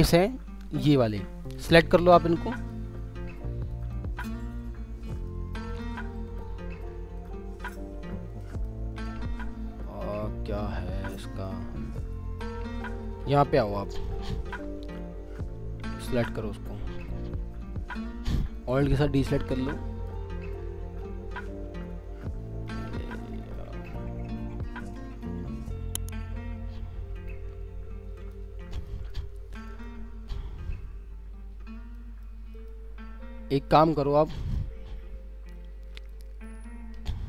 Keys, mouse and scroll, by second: 1.3 ctrl+click, 1.5 ctrl+double click, 3.6 ctrl+click, 4.5 scroll down 1, 5.0 alt+middle click, 5.1 alt+scroll down 1, 5.3 alt+scroll up 1, 8.3 ctrl+click, 12.0 ctrl+scroll down 2, 12.2 alt+w, 13.0 alt+w, 13.5 scroll up 1, 13.8 middle click, 14.0 scroll down 1, 14.3 middle click, 17.4 scroll up 1, 18.5 alt+click, 21.3 alt+w, 22.7 alt+middle click, 29.3 scroll down 1, 29.7 middle click, 34.3 alt+middle click, 36.1 alt+middle click, 36.7-37.2 alt+scroll down 1.